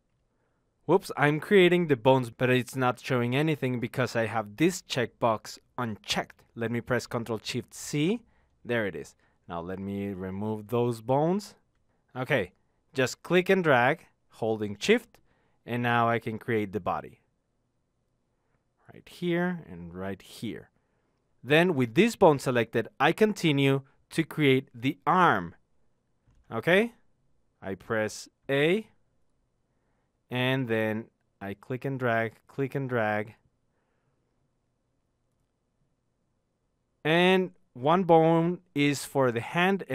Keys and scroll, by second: 7.4 ctrl+shift+c, 11.4 ctrl+z, 27.5 a.